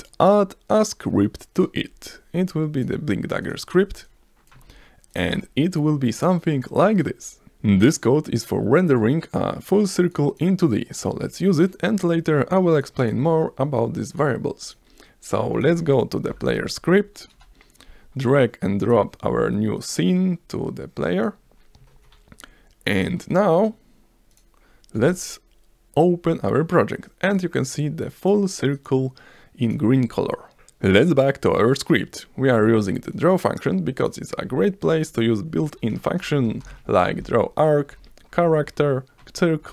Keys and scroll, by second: 5.1 v, 6.4 s, 16.4 p, 16.8 a, 17.3 Return, 23.3 s, 24.9 F5, 35.8 Return, 36.2-37.2 typing, 37.9 Down.